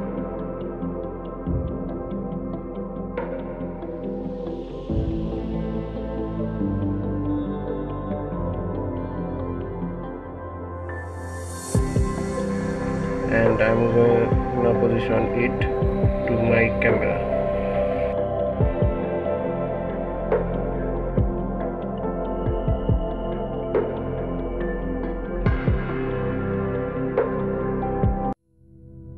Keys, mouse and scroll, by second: 2.6 click, 3.1 Tab, 3.9-4.5 middle drag, 4.5-5.0 scroll down 4, 5.0 middle click, 5.7 Tab, 6.3 Tab, 6.7-9.8 middle drag, 10.0 KP_1, 11.0 KP_1, 11.7 KP_Divide, 12.4-12.8 scroll down 3, 13.0-13.5 scroll up 2, 13.7 click, 16.7 g, 18.4 KP_1, 19.6 s, 22.9 g, 28.5-29.1 scroll up 2.